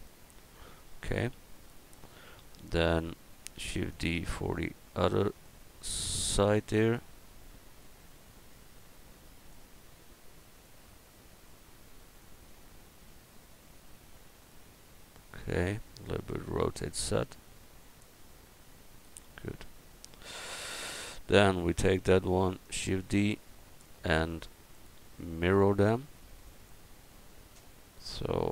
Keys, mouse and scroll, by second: 3.6 shift+d, 4.5-8.0 drag, 8.0-10.5 middle drag, 11.0-12.1 middle drag, 12.9 middle click, 13.3-16.4 drag, 16.5 r, 19.4 a, 22.3 shift+d, 23.2-24.7 drag.